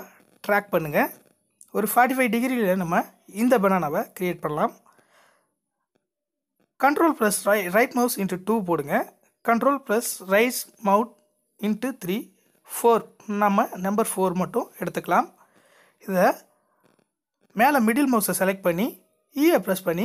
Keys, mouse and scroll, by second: 0.9 ctrl+z, 2.8 ctrl+right click, 5.7 ctrl+right click, 8.4 ctrl+right click, 11.4 ctrl+right click, 12.0 click, 12.1 click, 13.7-14.1 scroll down 2, 14.1-16.5 middle drag, 16.5 e.